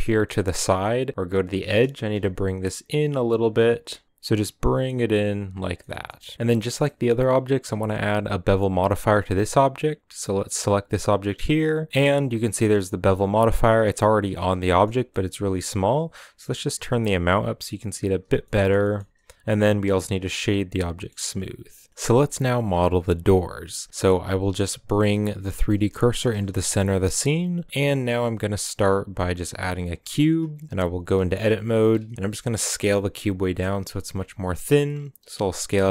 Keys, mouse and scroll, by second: 0.2 g, 1.3 g, 4.0 g, 5.4-6.2 scroll down 4, 5.5-5.9 middle drag, 5.9 a, 6.2 shift+middle click, 6.6 scroll up 1, 6.8-8.4 middle drag, 8.4-13.2 right drag, 13.2-14.4 drag, 14.4 shift+middle click, 14.7 scroll up 1, 14.9-16.3 middle drag, 16.3-18.2 shift+drag, 18.2-18.8 shift+middle drag, 18.8 scroll up 2, 20.2 w, 20.5-20.9 middle drag, 20.9-21.9 scroll up 2, 21.9-23.8 middle drag, 23.8-25.5 scroll down 13, 25.5 middle click, 26.1 shift+c, 26.6 shift+middle click, 26.8-27.7 scroll up 4, 29.8 shift+a, 30.9 Tab, 32.1 KP_Decimal, 32.5 scroll down 3, 32.8-33.5 middle drag, 33.5 s.